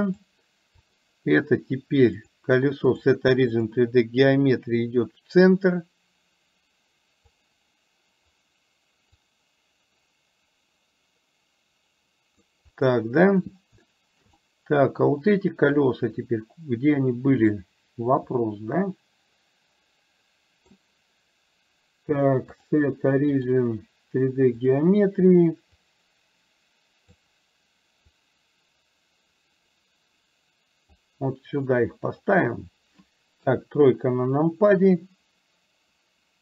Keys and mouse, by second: 0.9 click, 2.3-3.8 drag, 5.0-7.5 drag, 9.4-12.5 drag, 13.9-14.3 shift+middle drag, 14.5-15.1 middle drag, 15.9 click, 17.5-20.9 middle drag, 22.8-24.9 drag, 25.8-27.3 drag, 28.2-31.0 drag, 33.5 KP_3.